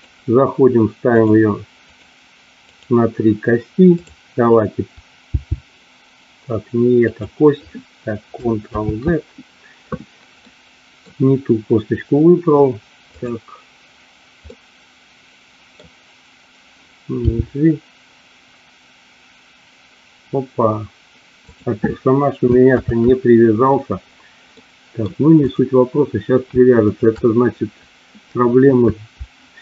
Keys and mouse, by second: 2.0 click, 2.6 click, 4.0 click, 5.3 g, 7.1 click, 8.6 ctrl+z, 10.3 middle click, 14.5-15.7 middle drag, 17.2 g, 21.4 click, 22.7 ctrl+z, 24.5 middle click, 25.4 click, 26.8 shift+click.